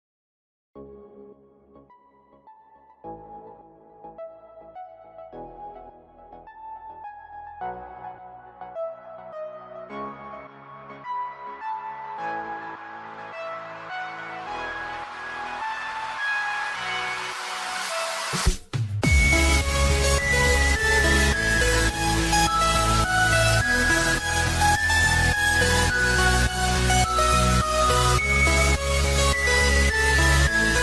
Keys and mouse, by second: 1.0 ctrl+k, 1.0 click, 1.7 BackSpace, 2.5 ctrl+k, 2.5 click, 2.5 BackSpace, 2.6 KP_1, 2.7 KP_0, 4.2 click, 4.2 KP_0, 4.2 KP_1, 4.2 BackSpace, 5.5 click, 5.5 KP_0, 5.5 KP_1, 5.5 BackSpace, 6.3 click, 7.7 click, 10.8 click, 12.8 ctrl+k, 14.7 ctrl+k, 14.7 click, 14.7 BackSpace, 15.4 KP_1, 15.8 Return, 17.7 click, 19.2 Return, 19.2 click, 19.2 KP_0, 19.2 KP_1, 19.4 click, 23.7 click, 25.1 click, 26.9 click, 30.7 click.